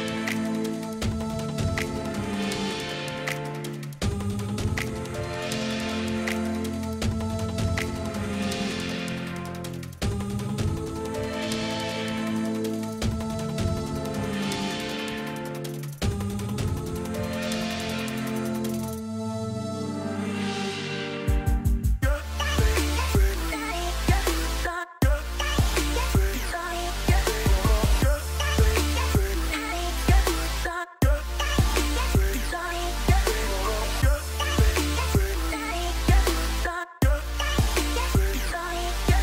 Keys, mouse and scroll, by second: 3.8 right click, 28.3 right click, 29.2 right click, 32.8 right click.